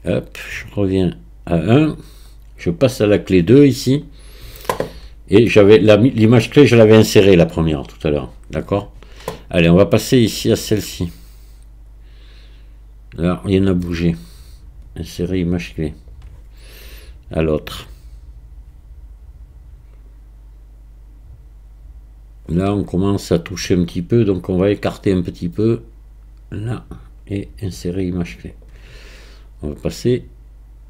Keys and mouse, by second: 10.3-13.4 drag, 14.8-16.1 right drag, 17.8-20.1 drag, 20.1-22.5 middle drag, 24.9-26.7 middle drag, 27.5-28.7 drag, 29.9-30.8 drag.